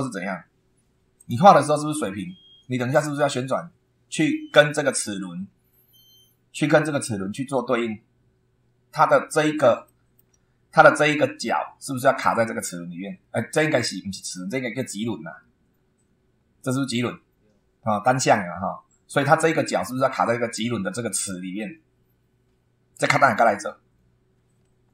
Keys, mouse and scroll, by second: 0.2 super+2, 1.2 click, 5.1-5.6 scroll up 2, 9.0-9.4 scroll down 1, 9.8 shift+middle click, 20.6 scroll up 1, 22.4 scroll down 2, 23.6 scroll down 2.